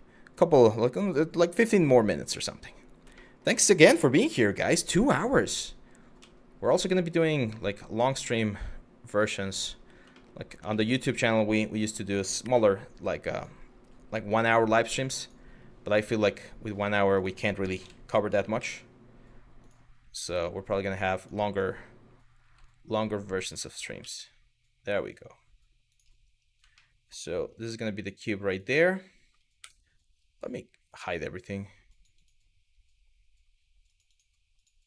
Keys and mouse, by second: 2.8-3.1 shift+middle drag, 5.8 z, 9.2 click, 9.8 shift+middle drag, 10.3 shift+middle drag, 12.0 shift+a, 13.9 g, 15.6 g, 16.8 click, 17.5 Delete, 17.5 End, 18.2 shift+a, 19.8 g, 20.8 click, 22.0 g, 23.6 s, 25.5 click, 26.4-26.8 shift+middle drag, 27.1 g, 29.2 Tab, 31.5 click, 33.5 click, 34.2 click.